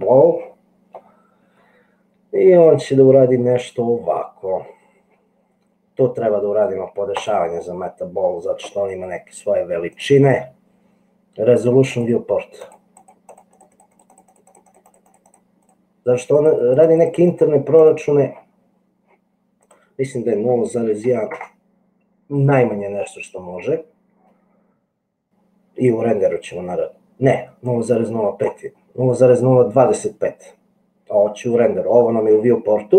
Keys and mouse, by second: 12.0 click, 15.0 click, 15.7 click, 16.5 click, 17.3 click, 19.8-22.5 drag, 27.8 click.